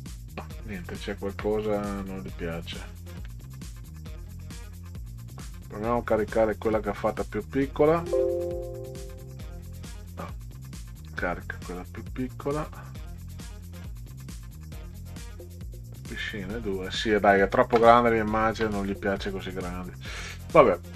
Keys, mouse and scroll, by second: 0.3 right click, 0.5 scroll down 2, 0.8 click, 2.1 click, 3.8 click, 4.8 click, 5.3 click, 5.5 click, 7.0 right click, 9.5 click, 10.0 right click, 11.2 click, 12.5 click, 12.7 click, 13.1 click, 13.3 click, 13.7 click, 14.1 click, 14.5 click, 15.8 click, 16.0 click, 18.3 ctrl+Up, 19.7 middle click.